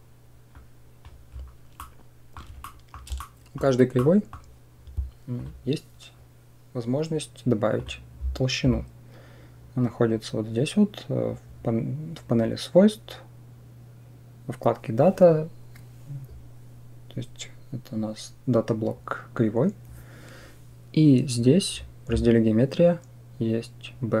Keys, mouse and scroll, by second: 0.5 click, 1.6-2.2 middle drag, 2.5-2.8 shift+middle drag, 3.0 middle click, 3.8 middle click, 7.6 click.